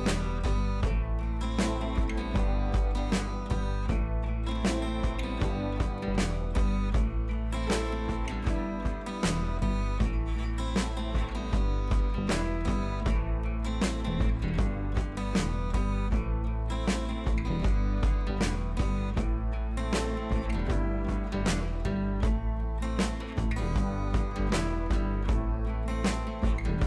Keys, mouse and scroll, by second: 2.5 click, 4.1 p, 6.6 p, 6.7 click, 9.1 click, 11.7 click, 13.3 click, 17.1 click, 20.5 ctrl+z, 21.5-25.7 drag.